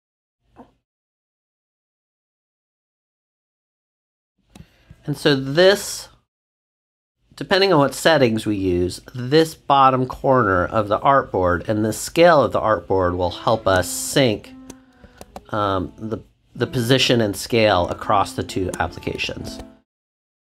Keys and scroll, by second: 3.5 alt+Left, 15.1 shift+super+z, 15.7 super+z, 19.4 shift+super+z.